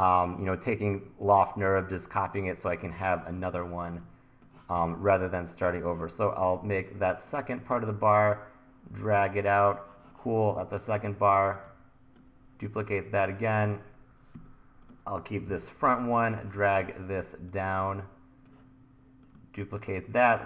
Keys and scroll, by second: 0.2 e, 2.9 1, 4.7 e, 15.5 Delete, 16.6 e.